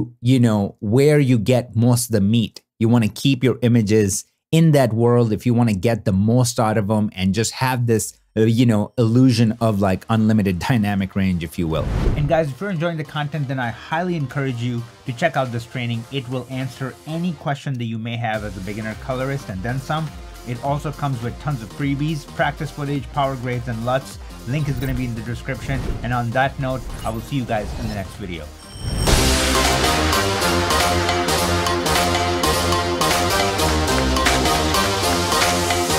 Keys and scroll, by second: 0.7 super+w, 5.2 super+w, 10.5 super+w.